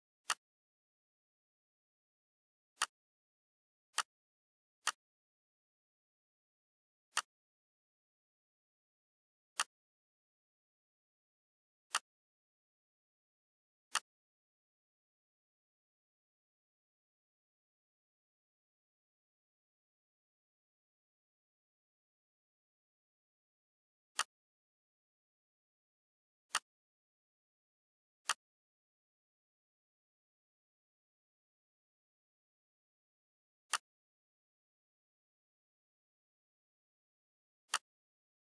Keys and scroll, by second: 16.5 8, 18.2 5, 19.5 Return, 23.1 z, 32.6 F4, 35.5 ctrl+q.